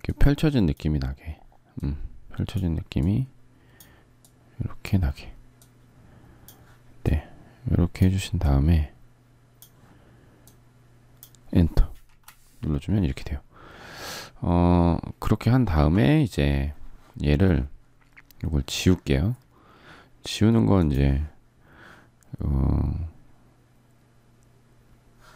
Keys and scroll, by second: 11.8 Return.